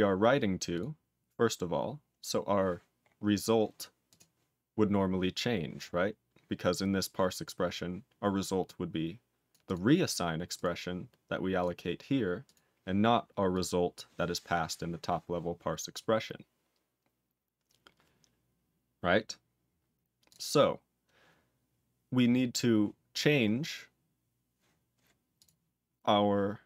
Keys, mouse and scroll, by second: 0.5 click, 0.7 click, 2.0-2.8 scroll up 7, 3.0-3.9 scroll up 5, 4.0 click, 5.9-6.6 scroll down 8, 6.8-7.8 scroll down 3, 8.6 click, 9.4 click, 9.6 click, 10.5 click, 11.5 click, 12.4 click, 13.5 click, 20.2 click, 25.3 click, 26.0 scroll up 2.